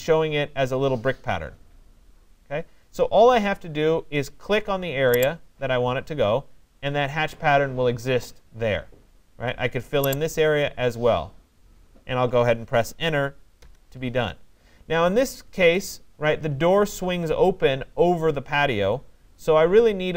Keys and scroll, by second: 13.2 Return.